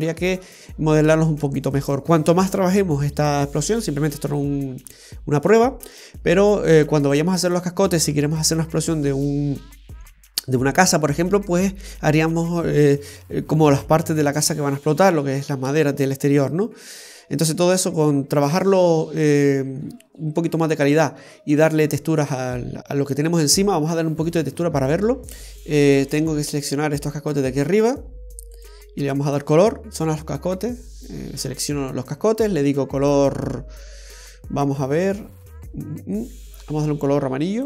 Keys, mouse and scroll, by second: 22.8-23.1 scroll down 2, 23.1 middle click, 25.4 scroll down 1, 26.3 right click, 28.7 click, 36.3 click.